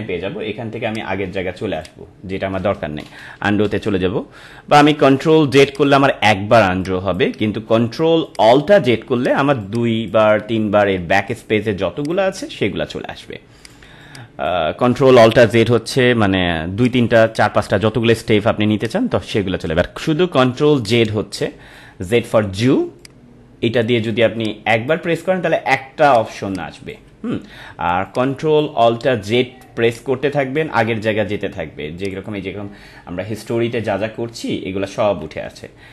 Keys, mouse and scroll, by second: 0.8 click, 5.7 click, 7.1-8.2 drag, 9.5 space, 9.9 click, 10.0 space, 12.0 click, 13.9 space, 14.0 click, 14.4 space, 16.8 click, 17.1 space, 17.2 click, 17.5 space, 18.8-20.7 drag, 21.1 space, 21.3 click, 23.0-26.1 drag, 26.4 space, 26.5 click, 28.0-32.0 drag, 35.8 space.